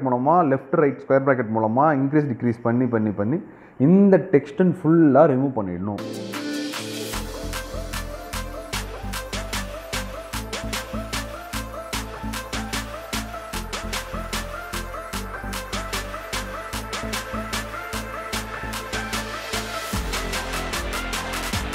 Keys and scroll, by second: 20.0 ctrl+space.